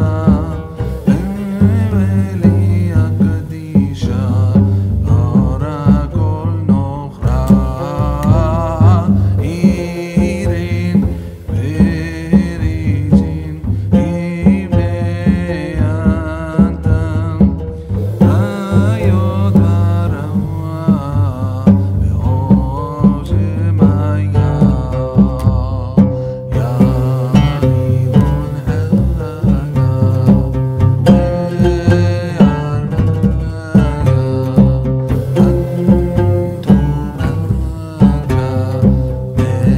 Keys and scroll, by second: 26.4 ctrl+Up.